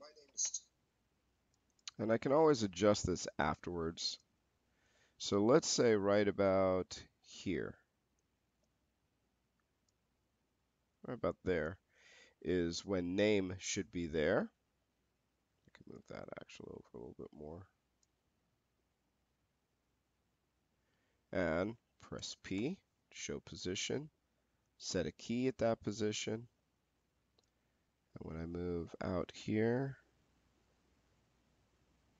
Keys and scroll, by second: 22.4 p.